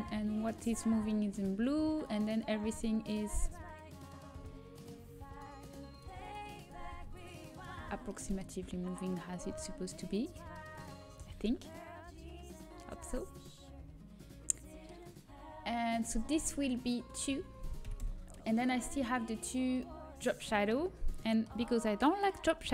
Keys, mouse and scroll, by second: 1.9-8.2 drag, 8.2-9.2 middle drag, 9.2-11.6 drag, 11.6-13.5 middle drag, 16.2-18.9 drag, 19.4 click, 20.0-22.0 right drag, 20.9-22.0 drag, 20.9-22.7 middle drag, 22.1 click, 22.1-22.7 right drag.